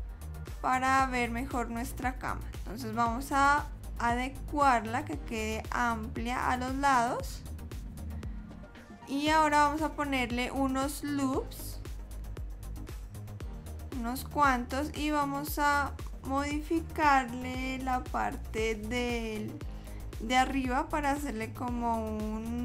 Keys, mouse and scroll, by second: 0.5 shift+middle click, 2.8 s, 8.6 super+z, 9.2 ctrl+r, 21.2 ctrl+r.